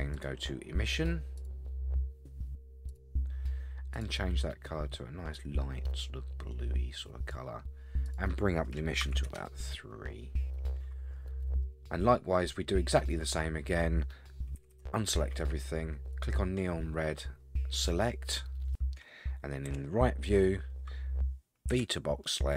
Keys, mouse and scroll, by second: 0.1 click, 1.4-3.0 drag, 3.9 click, 8.0-9.4 drag, 11.6 middle click, 14.6 a, 14.7 a, 16.1 click, 17.7 click, 19.7 KP_3, 21.7 b.